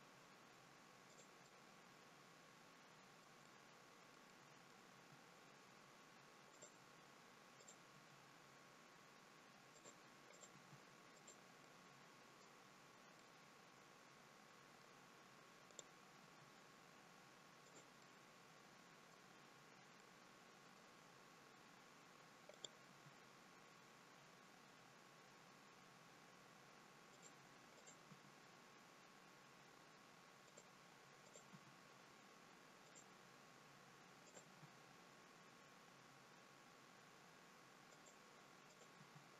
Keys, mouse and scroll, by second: 1.4 middle click, 3.4 middle click, 4.2 middle click, 4.8 g, 7.5 click, 7.8 g, 10.2 click, 10.4 g, 11.6 middle click, 12.5-13.1 scroll down 3, 13.1 middle click, 15.6 click, 16.1 g, 17.9 middle click, 19.9 middle click, 21.0-22.4 scroll up 2, 22.4 click, 22.7 g, 27.6 click, 28.0 g, 31.2 click, 31.4 g, 34.2 click, 34.4 g, 38.6 click, 38.9 g.